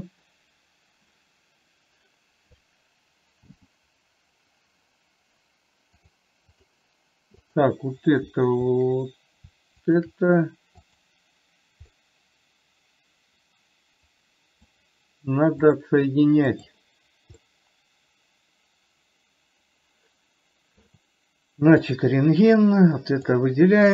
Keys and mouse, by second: 3.8 g, 6.5 click, 7.7-8.1 drag, 11.2 click, 12.2-15.0 middle drag, 16.0-17.1 drag, 17.7-21.2 middle drag, 22.2 click, 23.0 click.